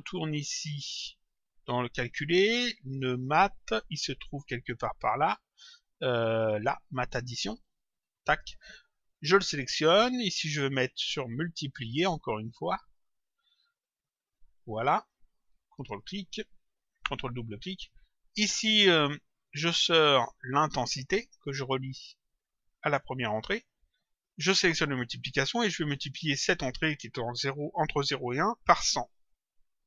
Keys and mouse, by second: 6.9 click, 9.2 click, 11.6 click, 12.8 click, 14.3 click, 15.6 ctrl+click, 19.5 click, 21.6 click, 24.3 click, 25.6 click, 28.7 click.